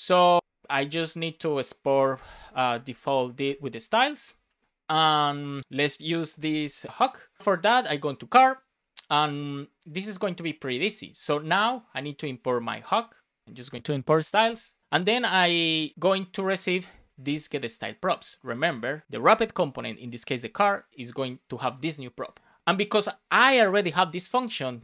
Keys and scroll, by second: 0.0 Down, 0.4 Return, 1.8 Return, 2.2 space, 3.6 space, 4.3 Down, 4.5 Return, 4.6 super+s, 6.4 alt+shift+f, 6.7 super+s, 12.8 Return, 13.4 space, 14.4 super+s, 16.6 Return, 18.0 Down, 18.9 Return, 19.8 BackSpace.